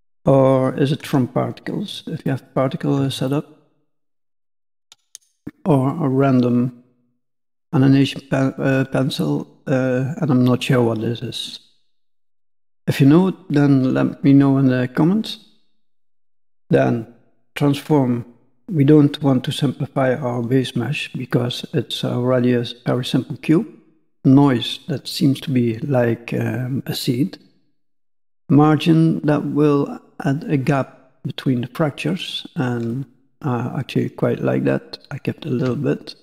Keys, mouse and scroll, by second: 3.3 shift+middle click, 4.5 click.